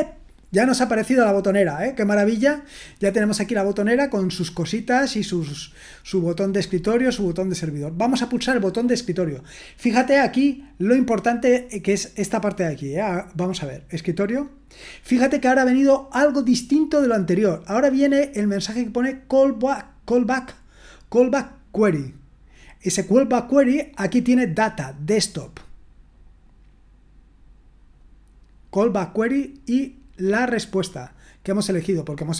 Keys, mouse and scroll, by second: 13.9 click, 18.8-23.3 drag, 24.2-31.8 drag.